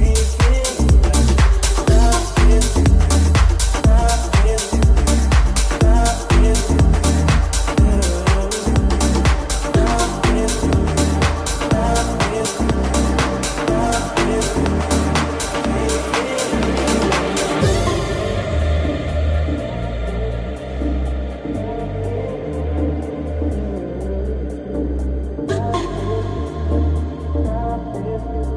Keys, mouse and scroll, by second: 0.5 Tab, 2.1 right click, 6.1 ctrl+s, 18.2 right click, 18.2-28.5 middle drag, 25.5 ctrl+z, 27.6 alt+z.